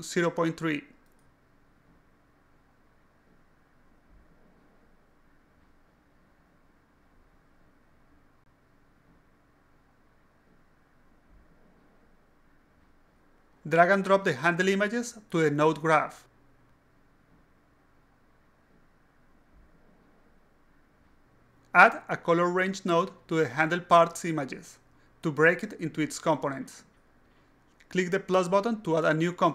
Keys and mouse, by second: 1.1 click, 3.9 click, 5.3 click, 6.1 click, 6.4 click, 7.3 click, 7.8-8.4 drag, 8.9 right drag, 9.3 click, 9.9 click, 10.0 click, 10.9 click, 11.7 click, 12.5 click, 13.6 click, 14.6 click, 15.4 click, 16.4-17.2 drag, 17.9 click, 18.4 click, 18.9 alt+click, 19.4 click, 19.8 click, 20.4 click, 20.7 click, 21.1 click, 22.7 click, 24.1 click, 28.6 click, 29.4 click.